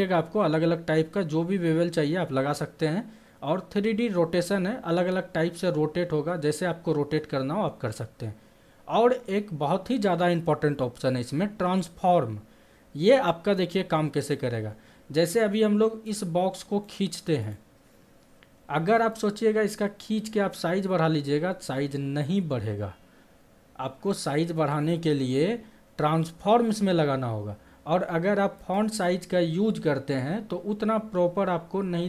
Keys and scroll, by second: 24.5 ctrl+z.